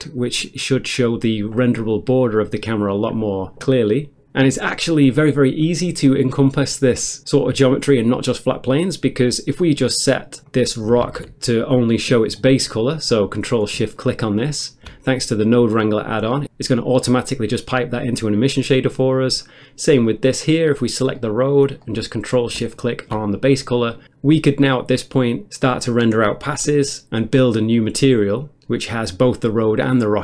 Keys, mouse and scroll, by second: 10.5 click, 11.0 ctrl+space, 11.9 middle click, 12.3 middle click, 12.5-13.1 scroll up 1, 13.1 middle click, 13.1 scroll up 1, 13.9 ctrl+shift+click, 16.2 middle click, 18.5 middle click, 18.8 middle click, 19.4 click, 20.4 middle click, 20.8 middle click, 21.1 middle click, 21.6 middle click, 22.7 ctrl+shift+click, 25.9 ctrl+shift+click, 27.2 ctrl+shift+click, 27.7 middle click, 28.0 middle click, 28.7 ctrl+shift+click.